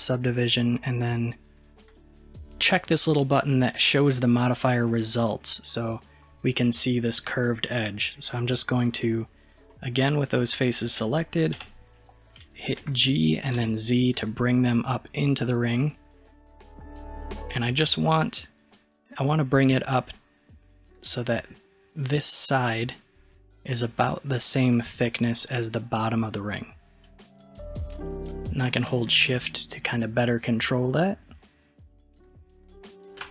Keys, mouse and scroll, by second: 2.0 click, 9.7-11.6 middle drag, 11.6 KP_1, 12.8 g.